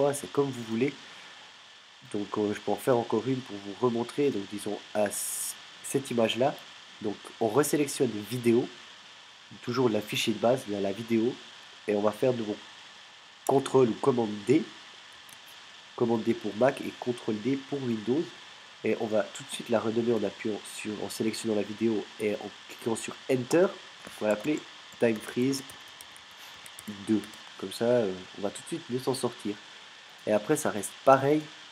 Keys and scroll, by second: 15.2 super+d, 23.5 Return, 24.3-27.7 typing.